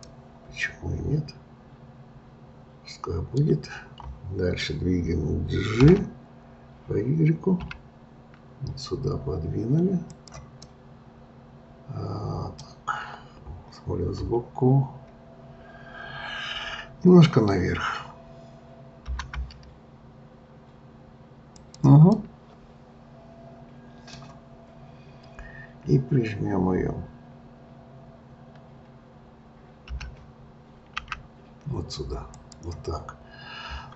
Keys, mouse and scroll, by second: 0.0-3.0 middle drag, 5.8 g, 10.7-13.6 middle drag, 15.6-18.6 scroll, 19.1 g, 22.1-25.2 middle drag, 29.9 g.